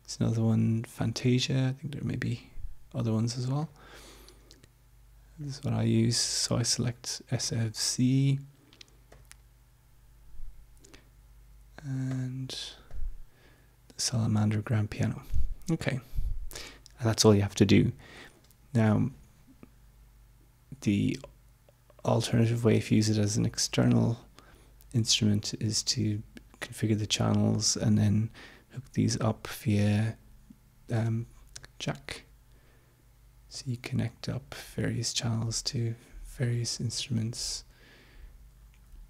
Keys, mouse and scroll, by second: 3.5 click, 5.3-7.6 drag, 9.1 click, 12.2 click, 12.8 click, 15.9 click, 31.6 click, 33.8 click, 36.9 click.